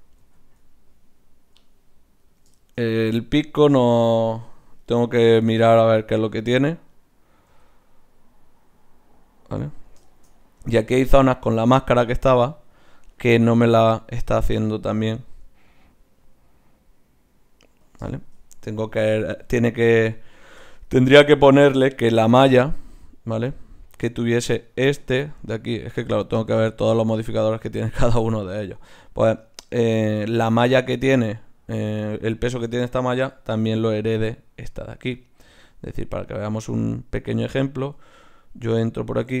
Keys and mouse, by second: 0.3 r, 2.6-6.9 middle drag, 3.5 r, 5.8 r, 6.9-8.0 drag, 7.5 r, 8.0-10.1 right drag, 12.4 r, 18.7 click, 18.9 right click, 19.3-20.6 drag, 19.3 r, 20.6-24.7 middle drag, 24.7-26.0 right drag, 26.0-29.4 drag, 32.3-35.0 right drag, 34.2 click, 35.0 middle click, 35.2 click, 35.2-38.2 right drag, 38.0 Tab, 38.9-39.4 right drag.